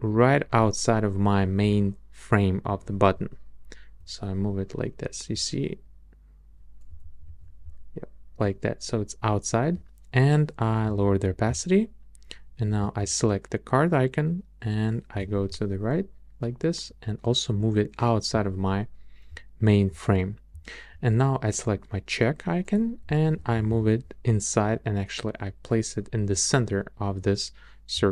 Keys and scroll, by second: 3.1 Right, 3.6 Right, 7.0 shift+Right, 13.0 shift+Left, 23.1 shift+Down.